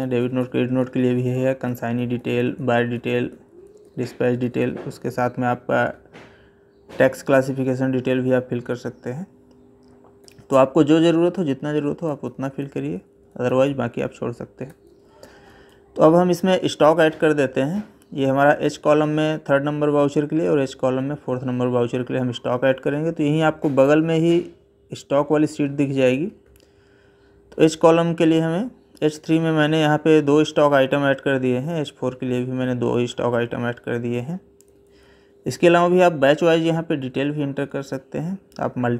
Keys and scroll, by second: 10.0 Left, 34.5 Right.